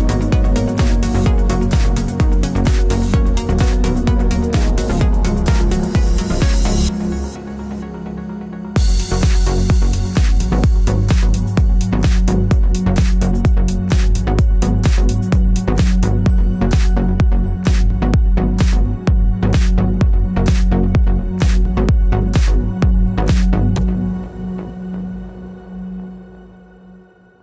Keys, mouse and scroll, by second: 1.2 click, 2.7 shift+Tab, 3.1 alt+d, 3.6 click, 3.7 ctrl+z, 5.2 shift+], 6.4 g, 6.9 click, 6.9 middle click, 7.6 click, 7.6 g, 8.3 alt+r, 8.4 scroll up 2, 8.6-9.8 shift+middle drag, 9.0 g, 10.0 middle click, 10.0 scroll, 10.2 click, 11.1 scroll down 1, 11.4-11.7 scroll up 1, 12.0 click, 12.6 shift+click, 13.3-16.5 drag, 13.6 s, 14.9-15.2 scroll down 2, 15.2 middle click, 16.1 s, 16.4 shift+middle click, 16.5 scroll, 17.0 g, 19.6-20.9 shift+middle drag, 19.8 scroll, 20.9 click, 21.1-24.2 middle drag, 21.2 alt+d, 21.7 click, 23.5 click, 24.2 drag, 24.3 scroll down 1, 24.5-26.7 middle drag, 25.0 scroll down 1, 25.1 scroll up 1, 26.7 click.